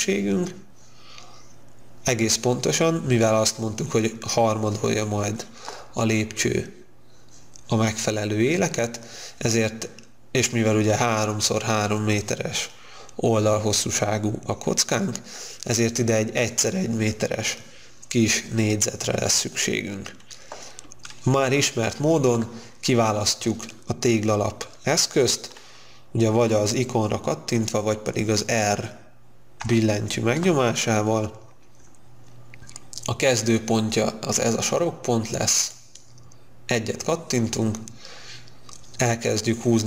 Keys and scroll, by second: 29.6 r.